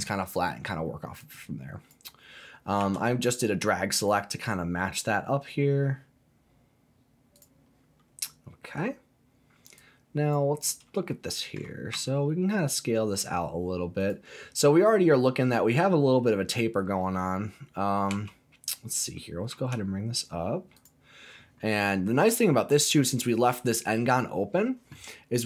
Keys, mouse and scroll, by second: 1.2 click, 2.8 s, 7.3 click, 9.1-9.7 scroll up 1, 9.8 click, 10.7 scroll down 1, 11.1 shift+middle click, 11.9 s, 14.0 click, 18.1 g, 19.5 z, 20.8 click, 23.2 scroll down 2, 23.3 middle click.